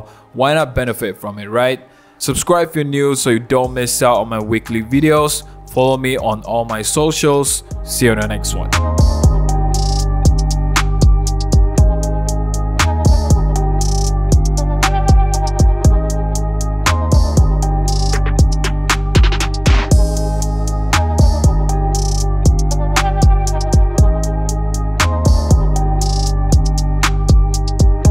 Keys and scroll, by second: 0.3 super+0, 0.6 super+-, 5.4 super+0, 5.7 super+-, 5.9 super+-, 6.1 super+-, 7.1 shift+Page_Up, 7.7 shift+Page_Up.